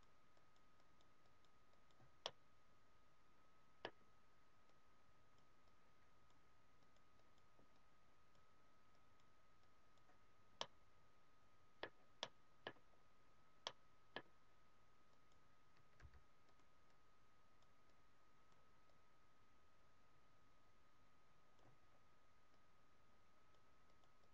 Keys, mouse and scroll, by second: 2.2 middle click, 4.6 click, 5.6 click, 10.2-10.5 scroll down 2, 10.5 middle click, 12.1 middle click, 12.8 scroll up 1, 13.5 scroll up 3, 13.5 middle click, 14.4 scroll down 2, 15.0 click, 16.0 f, 16.6 click, 21.8 scroll down 1, 22.5 click, 23.8 click.